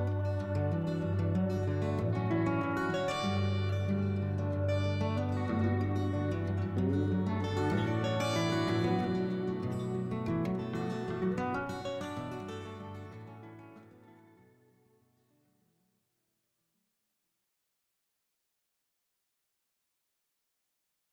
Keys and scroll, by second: 9.3 ctrl+n, 15.4 shift+s, 19.0 s.